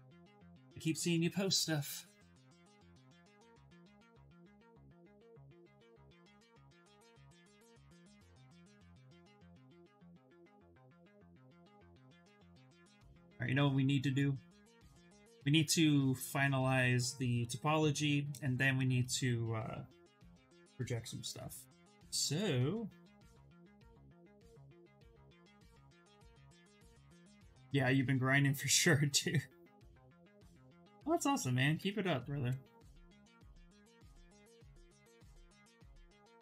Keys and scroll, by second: 5.8 6, 12.0 shift+f, 12.4 shift+f, 19.5-20.9 typing, 24.4 space, 25.3 s, 31.4 ctrl+z, 31.6 ctrl+z, 31.8 ctrl+z, 32.8 b.